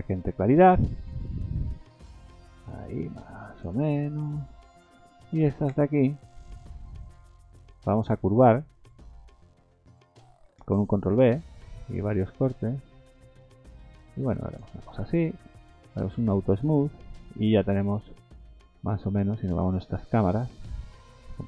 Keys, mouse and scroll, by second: 3.9 middle click, 4.4-5.0 scroll up 3, 4.7 middle click, 5.3 a, 5.5 a, 6.3 alt+shift+click, 10.9 ctrl+b, 15.2 Tab, 15.6 right click, 16.7-17.5 scroll up 7, 17.5 middle click, 18.3 middle click, 20.8 middle click.